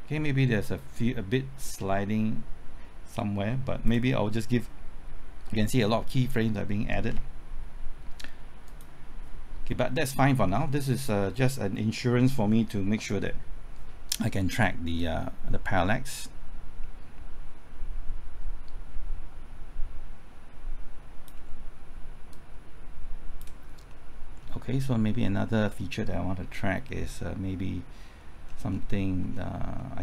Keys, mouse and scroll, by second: 10.0 scroll down 1, 11.2 middle click, 12.0 scroll up 1, 15.0-23.9 drag, 23.9 middle click, 24.5-25.2 scroll up 1, 25.2 middle click, 28.2-28.5 scroll down 1, 29.2-29.8 scroll up 1, 29.8 middle click.